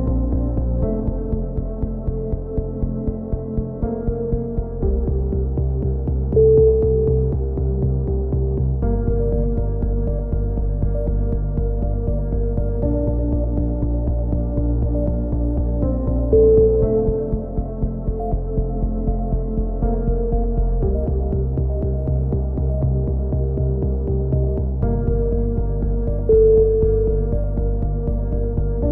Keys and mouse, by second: 1.0 ctrl+z, 1.7 ctrl+z, 1.7 a, 1.9 click, 2.8 right click, 3.0 KP_7, 3.2 z, 3.6 click, 4.5 right click, 4.8 click, 5.5 click, 5.6 a, 6.2 right click, 6.5 click, 7.6 click, 7.6 z, 7.7 z, 8.6 right click, 8.9 click, 9.7 a, 9.8 z, 9.9 click, 10.4 ctrl+z, 10.4 right click, 10.6 middle click, 11.8 KP_7, 12.0 z, 13.2 click, 17.7 ctrl+z, 18.1 right click, 18.4 click, 19.0 a, 19.1 z, 19.6 z, 20.6 z, 20.9 right click, 21.2 click, 22.3 KP_1, 22.4 z, 24.1-27.0 typing, 24.2 click, 24.5 right click, 25.1 click, 26.1 click, 27.2-28.7 drag.